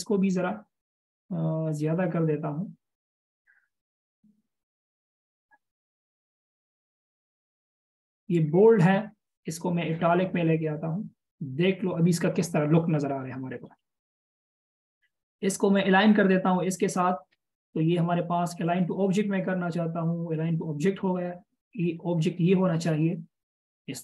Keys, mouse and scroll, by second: 13.3-14.1 scroll down 1, 14.5 alt+shift+scroll down 1, 17.0 alt+shift+click.